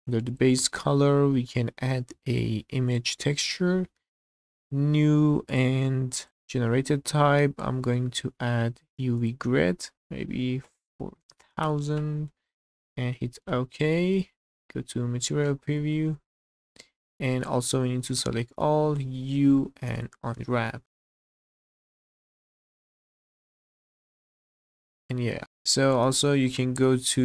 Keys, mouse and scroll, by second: 2.9 click, 4.1-13.0 drag, 11.0 KP_0, 12.9 KP_0, 14.1 middle click, 14.5 z, 15.0 click, 15.9 middle click, 16.8 scroll up 1, 17.2 shift+middle click, 18.1 a, 19.1 u, 21.2 middle click, 21.7 click, 21.9 z, 22.1 middle click, 22.4 click, 23.1 click, 23.6 scroll up 1, 23.9 shift+middle click, 24.2 scroll down 1, 24.4 middle click, 25.1 Tab, 25.4-25.9 middle drag, 26.0 scroll down 2, 26.3 shift+middle drag.